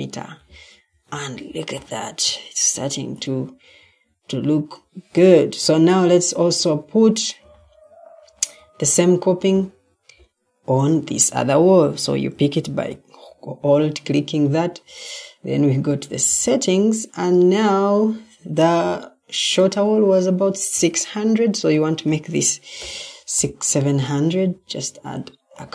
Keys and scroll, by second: 0.6 Escape, 7.1 typing, 7.3 Escape, 12.5 ctrl+t, 22.4-23.3 typing.